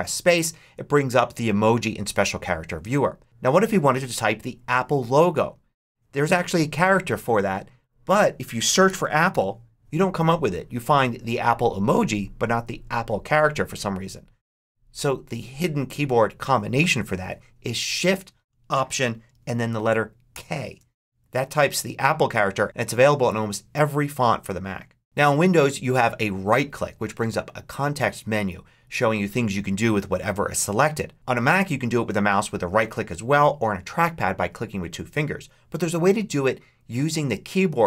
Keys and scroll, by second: 8.4-9.7 typing, 20.2 alt+shift+k.